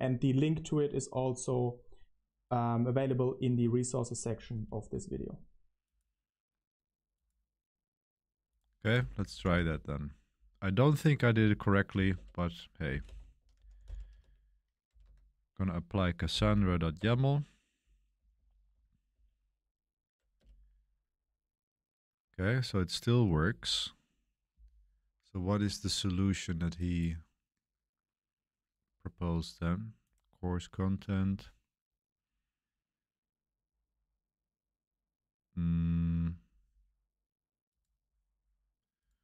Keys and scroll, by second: 4.0-4.8 typing, 9.0-9.9 typing, 11.2-16.9 typing, 17.0 Return, 18.1 Page_Up, 18.3 Page_Up, 18.7 Page_Up, 19.1 Page_Up, 20.4 Return.